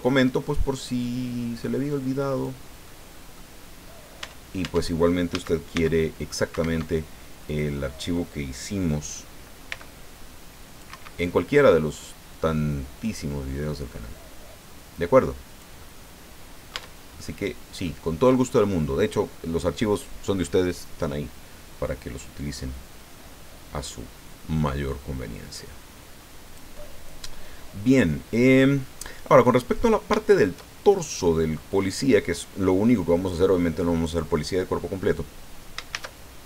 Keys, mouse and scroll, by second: 1.0-2.6 drag, 2.8 middle click, 4.2 Tab, 5.3 a, 5.7 c, 6.5 Escape, 7.4 click, 9.7 c, 10.1 click, 10.9 Escape, 12.3-15.8 drag, 15.8-16.9 middle drag, 16.7 Tab, 17.2 middle click, 24.6-26.7 drag, 26.8-28.1 middle drag, 28.1 scroll down 1, 28.6 middle click, 29.6-30.0 scroll up 1, 31.2-33.5 drag, 35.9 shift+a.